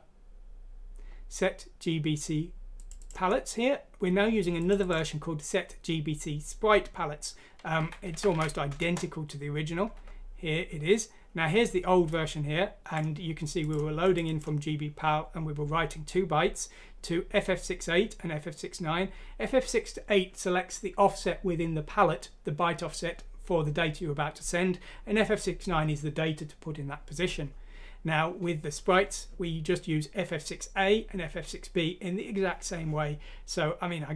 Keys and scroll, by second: 7.7 ctrl+c, 8.1 ctrl+f, 8.3 v, 8.7 Return, 9.9 Escape.